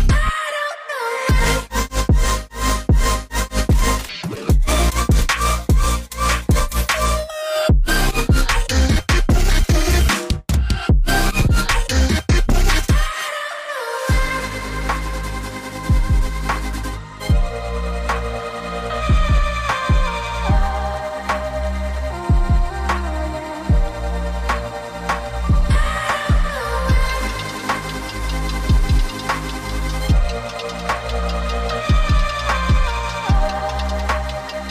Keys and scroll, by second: 1.2 typing, 1.5 Return, 3.0 typing, 23.8 g, 26.1 ctrl+h, 30.6 v.